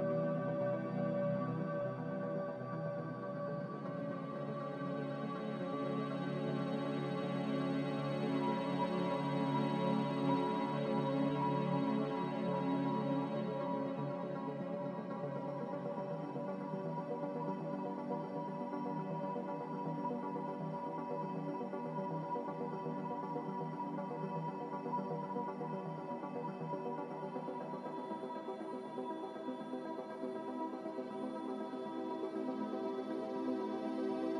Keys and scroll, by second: 7.5 z, 11.1 a, 13.9 z, 14.9 Delete, 19.8-21.6 typing, 31.6 9, 31.7 0, 31.9 Return, 32.2 b.